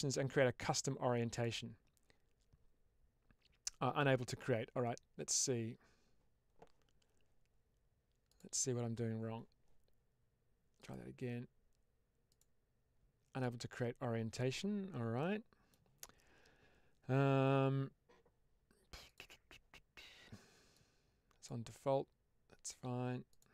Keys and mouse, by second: 8.2 click, 10.7-13.6 drag, 15.1 middle click, 20.7 click, 23.2 click.